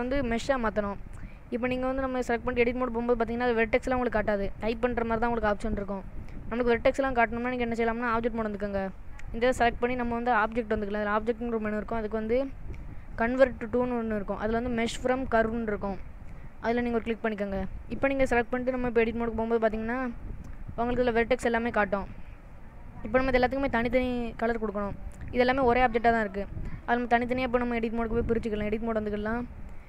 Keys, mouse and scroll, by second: 0.3 middle click, 1.8 click, 3.2 middle click, 3.8-4.2 scroll up 4, 4.7-5.7 scroll down 5, 7.1 click, 7.4 click, 11.4 click, 19.1 click, 20.3 middle click, 21.0-21.6 scroll up 5, 21.9 middle click, 22.4 scroll up 1, 22.6-23.5 scroll down 4, 24.4 scroll down 1, 24.6 click, 25.9 click, 26.4 click, 28.1 click, 29.5 shift+middle click.